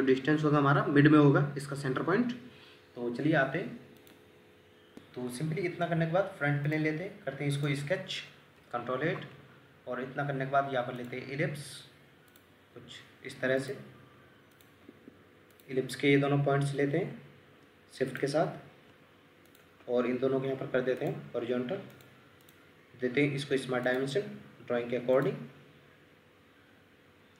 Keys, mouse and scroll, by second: 4.9 Escape, 8.6 ctrl+8, 14.9 Escape, 19.5 shift+click, 22.4 double click.